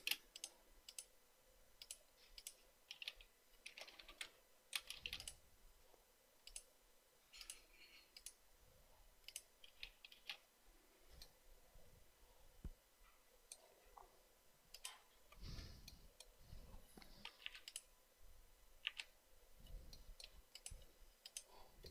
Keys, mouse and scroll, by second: 0.2 space, 3.2 space, 4.0 Escape, 5.2 space, 10.0 space, 10.7 space, 17.8 Delete, 19.3 Delete.